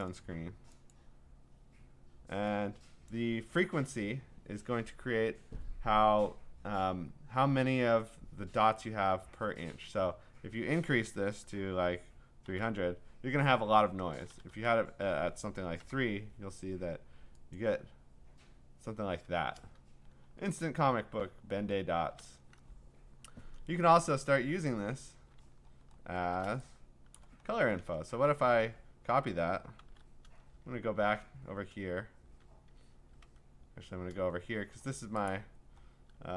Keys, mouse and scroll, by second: 0.0 click, 0.9 click, 3.1 click, 12.2-13.1 typing, 14.1 BackSpace, 14.3 BackSpace, 14.5 BackSpace, 15.8 3, 17.6 click, 19.5-20.6 scroll, 20.8 scroll down 1, 20.8-22.6 scroll down 16, 23.9-24.8 scroll down 5, 25.4-26.4 scroll up 13, 27.2 click, 27.5-27.8 scroll, 28.3 ctrl+a, 29.5 middle click, 29.5 scroll down 5, 29.8 ctrl+c, 30.5 ctrl+Tab, 33.2 ctrl+Tab, 34.5-35.3 scroll, 35.3 click, 35.6 scroll.